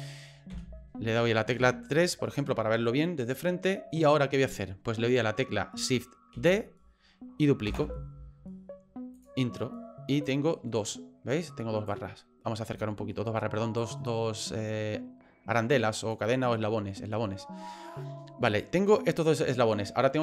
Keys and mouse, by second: 0.5 KP_1, 1.6 KP_3, 6.3 shift+d, 10.2-11.9 drag, 12.9 shift+middle click, 13.8-16.1 drag, 18.5 right click.